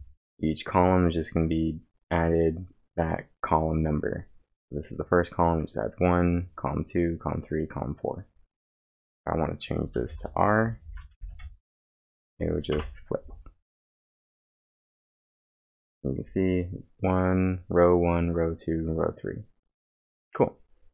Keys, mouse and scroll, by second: 9.7-11.3 typing, 11.6 ctrl+`, 12.2 Up, 12.7 Return, 14.4-15.2 typing, 14.7-16.5 scroll down 1.